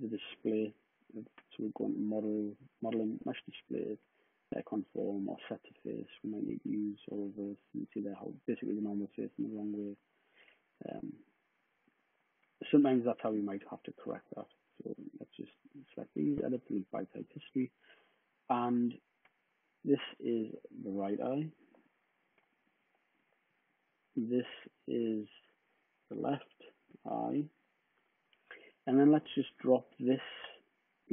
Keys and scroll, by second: 9.0 super+z, 9.7 super+z, 13.1 super+z, 20.8-23.5 typing, 25.4-28.0 typing.